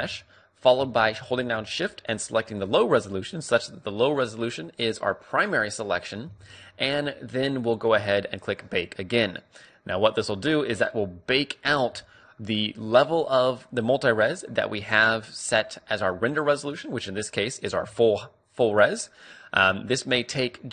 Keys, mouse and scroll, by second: 0.2 z, 2.6-4.4 right drag, 6.5 z, 9.5 click.